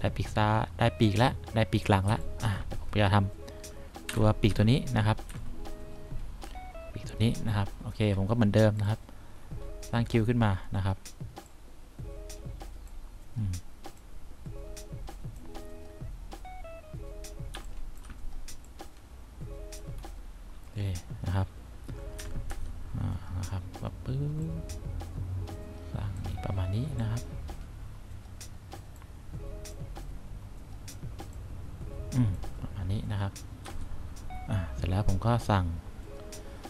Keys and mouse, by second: 2.2 1, 4.2 F1, 4.6 F2, 5.4 F3, 14.2 click, 14.9 click, 17.7 1, 22.3 F3, 22.7 F4, 28.0-29.2 drag, 29.8 click, 33.8 F1.